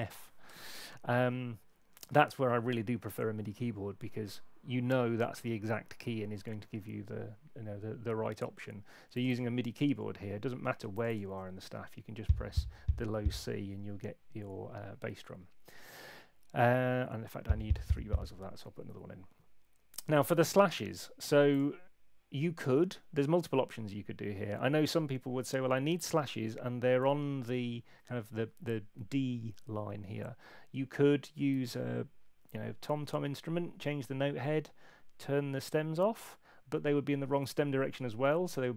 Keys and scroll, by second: 0.6 Escape, 18.9 ↺.